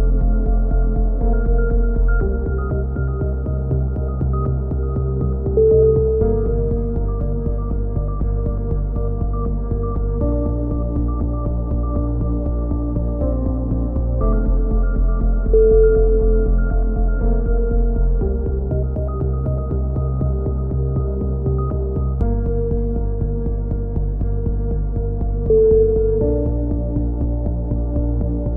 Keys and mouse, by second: 0.5 middle click, 1.0-2.0 drag, 2.7 z, 3.2 click, 12.2 click, 13.5-15.2 drag, 14.7 s, 17.3 ctrl+z, 18.1 KP_7, 18.5 z, 18.8 click, 19.6 c, 22.6 right click, 23.1 s, 23.5 middle click, 25.8 c, 26.8-27.9 right drag, 27.0 s.